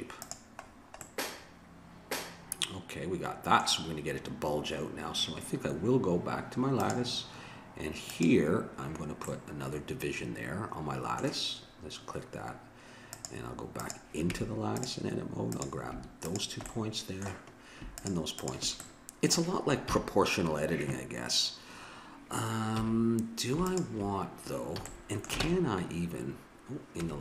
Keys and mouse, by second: 0.7 middle click, 1.1-2.7 middle drag, 6.8-10.1 drag, 10.1 middle click, 13.1-14.3 drag, 14.3 Tab, 16.7 click, 19.9 KP_7, 22.7 a, 24.8 a, 25.4 ctrl+Tab, 27.0 Tab.